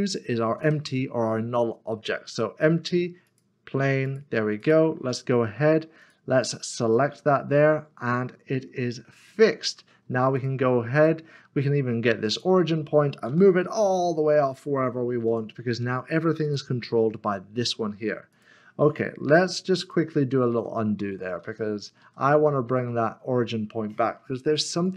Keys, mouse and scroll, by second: 0.4 a, 3.3 click, 7.8-8.5 scroll down 1, 8.5 middle click, 10.3 click, 13.3 g, 15.3 click, 20.5 ctrl+z, 24.8 click.